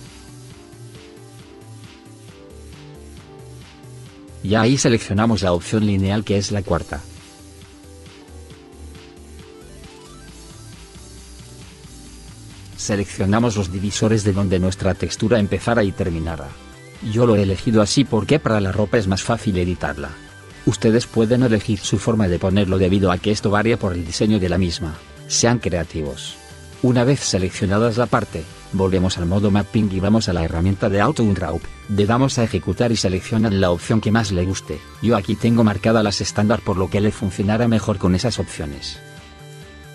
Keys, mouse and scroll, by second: 1.0 right click, 2.3 middle click, 2.7 right click, 3.5 middle click, 3.9 right click, 9.2 right click, 11.6 middle click, 13.2 right click, 16.5 right click, 29.9 click, 39.7 middle click.